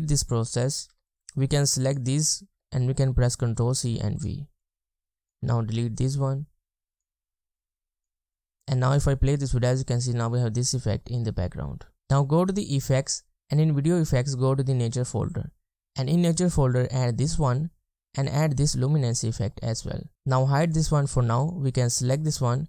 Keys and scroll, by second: 0.9 ctrl+v, 1.1 ctrl+v, 2.5 ctrl+c, 3.6 ctrl+v, 5.4 BackSpace.